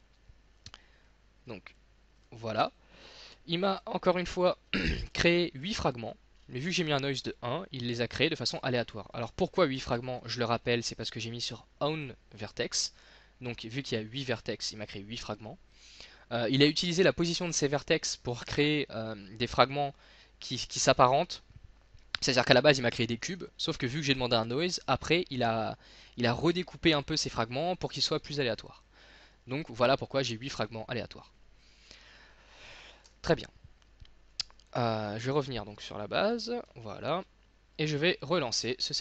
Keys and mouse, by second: 2.2 z, 8.9 middle click, 9.9 ctrl+z, 12.6 middle click, 29.1-32.3 middle drag, 33.1 x, 34.3-36.7 drag, 36.9 z.